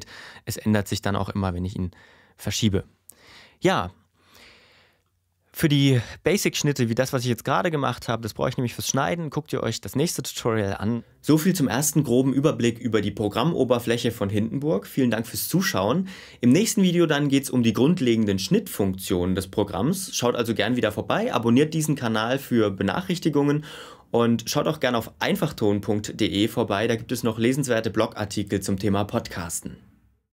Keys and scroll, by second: 3.2 ↻.